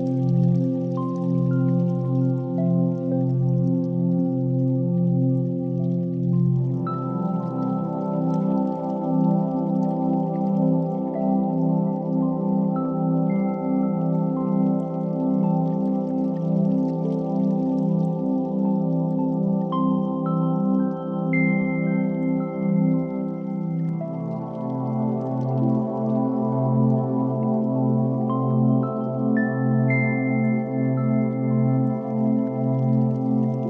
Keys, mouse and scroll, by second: 2.6-10.1 drag, 10.1-11.5 right drag, 11.5 ctrl+1, 12.6-15.0 right drag, 15.0-15.4 middle drag, 15.4 Tab, 15.7 2, 16.1 alt+z, 17.6 alt+z, 18.2 ctrl+b, 23.9 Tab, 24.4-25.6 middle drag, 25.6 KP_1, 26.0 shift+a, 28.9 g, 31.2 s.